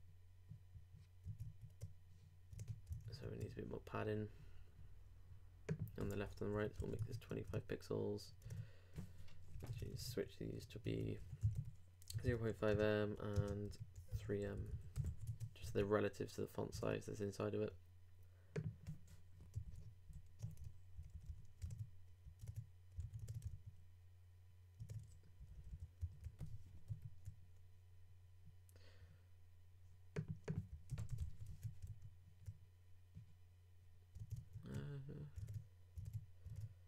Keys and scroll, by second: 6.8 super+2, 7.0 super+Tab, 7.5 super+r, 8.4 super+Tab, 9.5 super+BackSpace, 15.0 super+BackSpace, 15.3 super+Tab, 15.7 super+r, 16.8 super+Tab, 19.6 alt+Up, 20.6 alt+super+Up, 21.0 alt+super+Right, 21.6 super+Right, 21.7 super+Tab, 23.0 super+s, 23.2 super+Tab, 23.5 super+r, 24.8 super+Tab, 25.4 super+Down, 26.0 super+Down, 26.9 super+4, 30.9 super+BackSpace, 31.2 super+s, 31.5 super+Tab, 31.9 super+r, 34.7 super+Tab, 35.5 super+Tab, 36.0 super+Tab, 36.5 super+Tab.